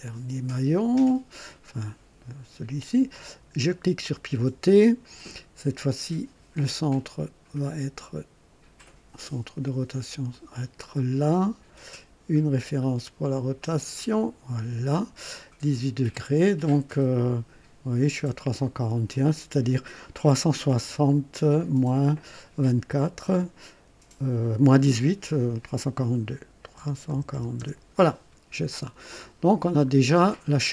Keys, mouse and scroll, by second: 3.1 click, 10.3 click, 13.9 click, 26.7 KP_3, 27.0 KP_4, 27.3 KP_2, 27.5 KP_Enter, 29.0 click, 29.6 scroll down 1, 30.1 right click.